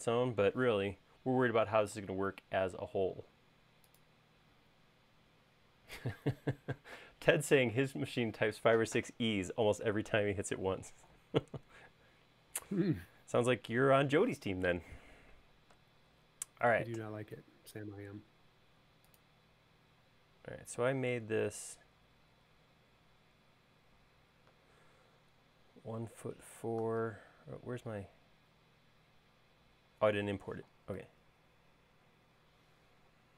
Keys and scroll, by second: 18.2 l, 24.9 space, 31.5 super+Tab.